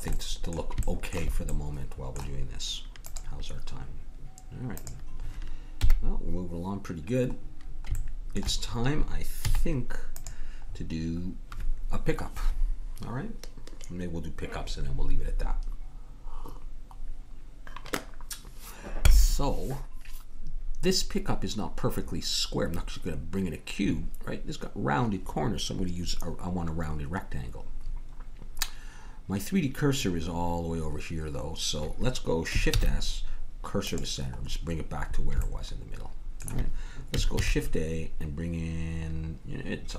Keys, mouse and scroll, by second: 4.2-5.7 middle drag, 5.7 KP_1, 7.5-9.9 middle drag, 9.4 z, 27.8-30.9 middle drag, 32.8 shift+s, 35.5 middle click, 37.4 shift+a.